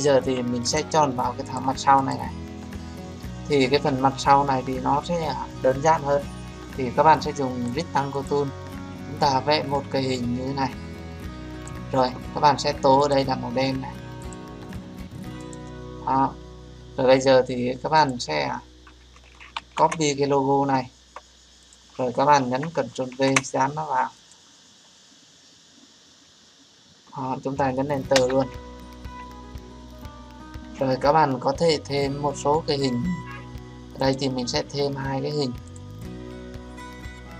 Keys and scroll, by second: 19.5 ctrl+c, 23.1 ctrl+v, 32.5 Return.